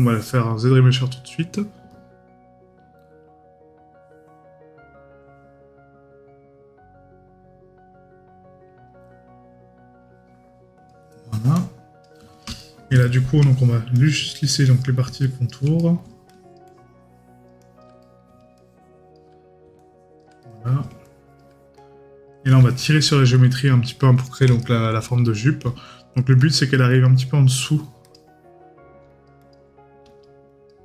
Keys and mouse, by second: 12.6 right click, 15.8 right click, 18.0 right click, 20.4 right click, 22.8 right click, 24.3 right click.